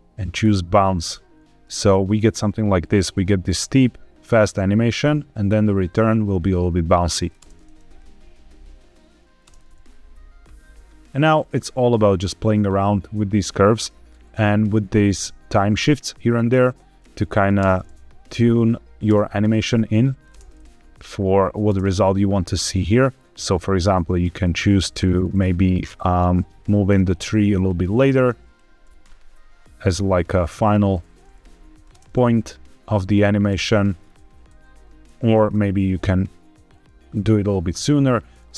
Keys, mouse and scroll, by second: 1.5-7.2 drag, 7.3 space, 9.3 space, 10.9 click, 16.3-16.9 drag, 17.5 space, 18.9 space, 19.5-20.1 drag, 20.2 space, 21.5 space, 22.5-24.3 drag, 24.8 click, 25.7-26.6 scroll down 2, 26.6 a, 26.8 KP_Decimal, 27.5-28.1 scroll down 3, 28.1 click, 28.7 g, 28.9 x, 30.5 click, 31.3-31.7 drag, 31.8 space, 33.4 space, 34.0 ctrl+z, 34.7 ctrl+z, 35.2 g, 35.4 x, 37.8 click, 38.4 shift+middle click, 38.4-38.5 scroll down 2.